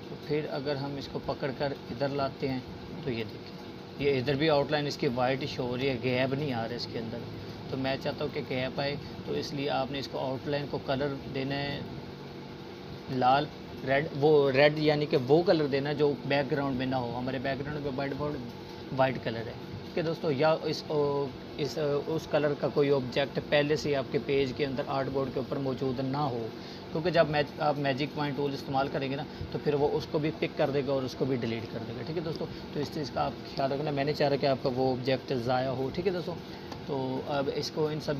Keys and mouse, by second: 7.1 click, 23.7 click, 34.8 click.